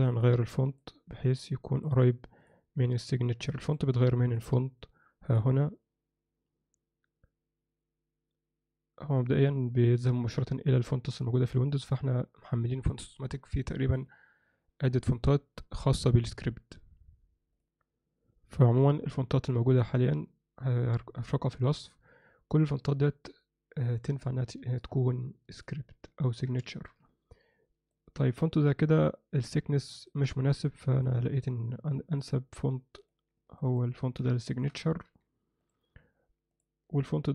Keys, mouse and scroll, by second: 0.3 click, 1.4 click, 2.4-3.7 drag, 4.4 click, 5.3 click, 26.2 ctrl+middle click, 26.6 shift+middle drag, 27.1-27.9 ctrl+middle drag, 28.2-30.1 ctrl+middle drag, 33.6 ctrl+middle click, 34.0 ctrl+middle click, 34.4 alt+shift+middle click, 35.1 g, 36.5 click.